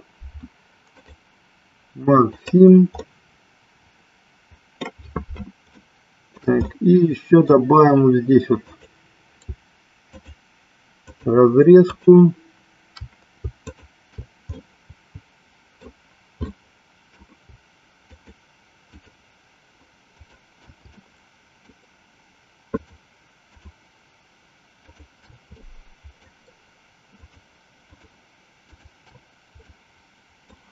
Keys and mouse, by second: 0.9-2.5 right drag, 3.2-4.9 middle drag, 5.8 shift+middle click, 6.8 middle click, 8.7 click, 10.0 shift+click, 11.9 shift+click, 13.7 shift+click, 14.7-15.9 middle drag, 16.7 middle click, 18.2 shift+click, 19.0 shift+click, 20.2 shift+click, 21.2 shift+middle click, 22.8 shift+click, 23.7 shift+click, 24.9 shift+click, 25.8 shift+middle click, 27.2 shift+click, 27.9 shift+click, 28.8 shift+click, 29.8 middle click.